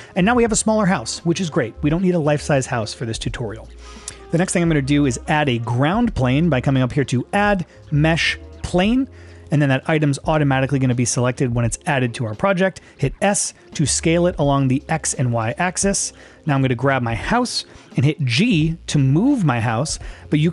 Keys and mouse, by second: 3.1 middle click, 3.7 click, 4.4 middle click, 7.3-9.4 drag, 13.3 s, 18.4 g.